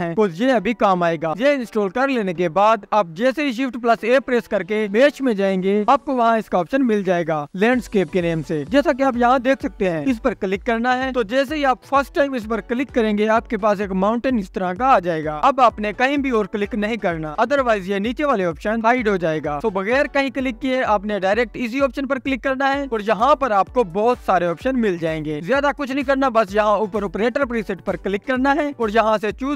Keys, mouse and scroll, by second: 3.5 click, 3.5 shift+a, 11.3 KP_Decimal, 22.6-29.5 drag.